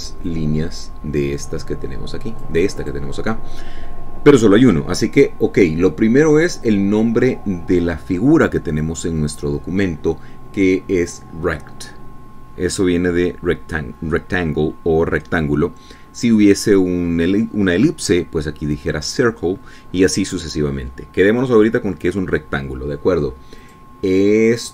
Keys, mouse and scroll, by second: 1.6-3.9 drag, 4.1 click, 7.8 click.